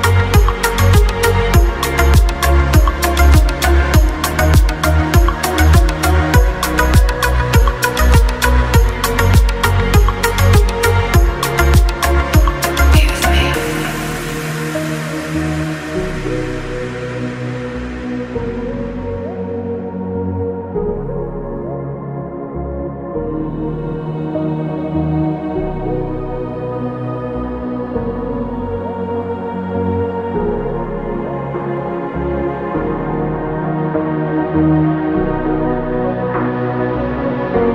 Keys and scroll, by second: 5.6 ctrl+d.